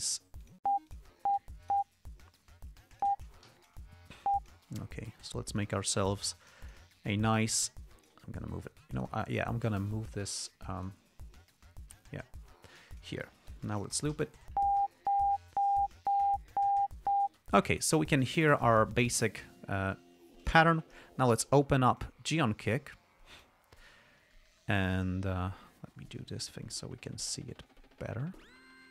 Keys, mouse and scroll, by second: 0.2 d, 0.8 click, 1.2 click, 2.0 click, 3.3 click, 3.8 g, 4.3 e, 4.5 click, 5.6 alt+click, 6.6 alt+g, 6.8 alt+click, 7.4 alt+click, 8.9 ctrl+scroll up 2, 9.3 ctrl+click, 10.7 click, 12.0 ctrl+scroll down 2, 13.0 click, 14.0 ], 14.5 l, 17.6 space, 18.9 click, 20.7 click, 22.3-23.9 drag, 28.4-28.9 drag.